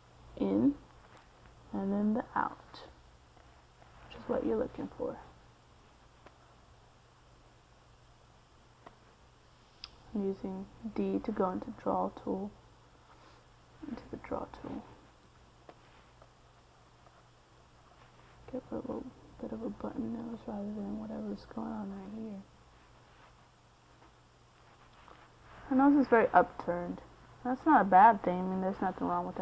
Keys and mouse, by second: 3.9 click, 9.7 middle click, 11.9 middle click, 12.9 click, 17.8 middle click, 19.9 f, 21.4-24.1 drag, 24.8-25.8 middle drag, 28.7 middle click.